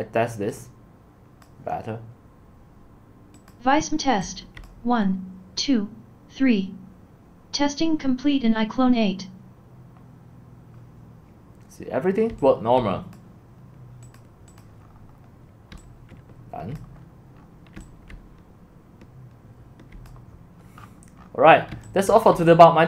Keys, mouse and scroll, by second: 4.2 c, 4.7 click, 5.1-10.7 middle drag, 10.7-12.3 scroll up 1, 12.3 c, 13.1-14.8 drag, 14.8-15.7 scroll up 5, 15.5-19.9 typing, 16.8 click, 17.0-17.7 scroll up 4, 20.1 click, 20.8 middle click, 20.8-21.7 scroll down 9, 21.2 middle click, 21.7 x, 22.1 c, 22.3-22.8 drag.